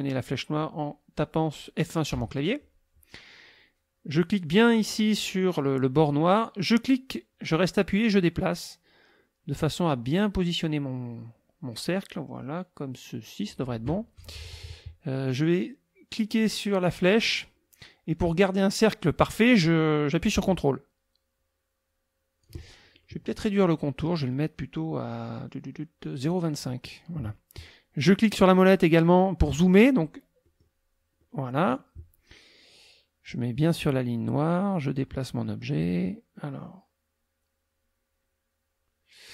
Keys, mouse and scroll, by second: 2.1 F1, 6.7-13.6 drag, 16.3-22.6 drag, 24.2 right click, 26.2 click, 30.4 middle click, 31.2 middle click, 33.9-39.3 drag.